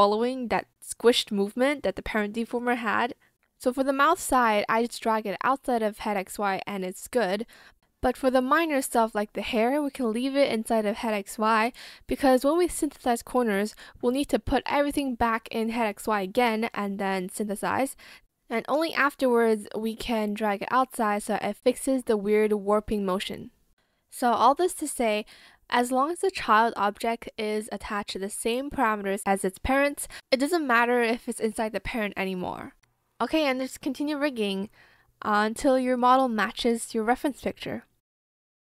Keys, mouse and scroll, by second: 11.5 ctrl+click, 11.7 shift+click, 11.9 ctrl+shift+z, 11.9 click, 12.3 shift+click, 12.4 ctrl+z, 12.9 ctrl+z, 13.3 shift+click, 13.7 ctrl+click, 15.3 ctrl+z, 15.3 shift+click, 15.4 ctrl+z, 15.7 shift+click, 15.8 ctrl+z, 15.8 shift+click, 18.2 shift+click, 18.3 ctrl+z, 18.4 ctrl+z, 18.6 shift+click, 19.0 shift+click, 19.2 shift+click, 20.2 shift+click, 20.3 shift+click, 20.4 shift+click, 20.6 ctrl+shift+z, 21.0 shift+click, 21.2 ctrl+z, 21.2 shift+click, 23.0 ctrl+shift+c, 23.1 ctrl+shift+v, 23.2 ctrl+z, 23.8 ctrl+shift+c, 23.9 ctrl+shift+v, 24.4 shift+click, 24.6 shift+click, 24.6 shift+click, 25.2 ctrl+z, 25.4 shift+click, 27.0 shift+click, 28.1 shift+click, 28.2 ctrl+z, 28.3 ctrl+z, 29.8 shift+click, 30.5 shift+click, 30.6-31.3 typing, 31.6 ctrl+z, 31.8 ctrl+z, 32.3 ctrl+alt+click, 33.5 shift+click, 34.1 shift+click, 35.5 ctrl+z, 35.6 shift+click, 36.6 ctrl+z, 37.5 ctrl+shift+c, 37.5 ctrl+shift+v.